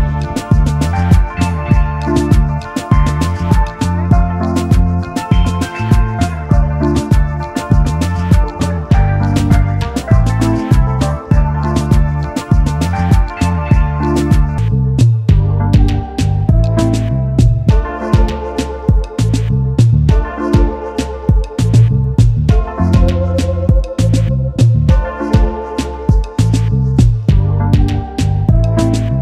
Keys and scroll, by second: 1.2 0, 1.3 Return, 2.0 space, 2.8 space, 7.3 p.